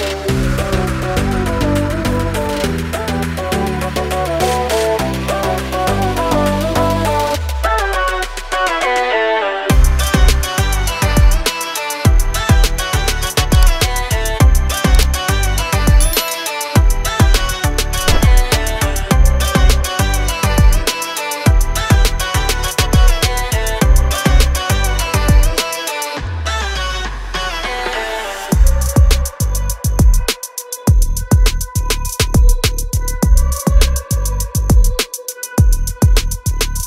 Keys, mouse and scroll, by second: 1.7 click, 3.4 click, 5.1 scroll up 1, 6.9 click, 7.1 double click, 8.1 click, 12.9 click, 15.4 click, 16.6 click, 17.6 click, 22.6 click, 24.1 click, 28.9 click.